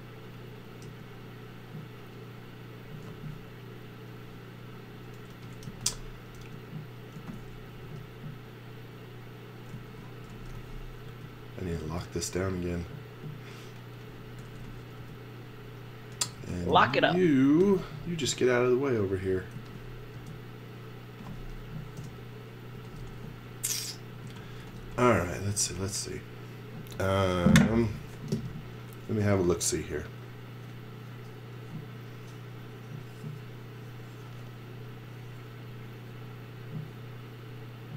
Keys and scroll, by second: 0.9 e, 5.3-7.8 typing, 8.8-11.0 typing, 14.1-17.6 typing, 19.5 z, 20.1 space, 21.1 space, 22.7-25.5 typing, 26.5 x.